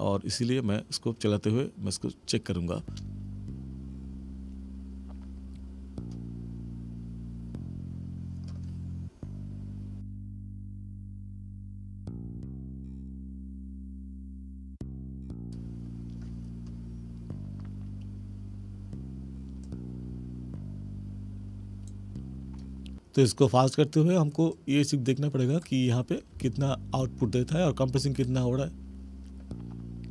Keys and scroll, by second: 2.8 space, 26.3 space.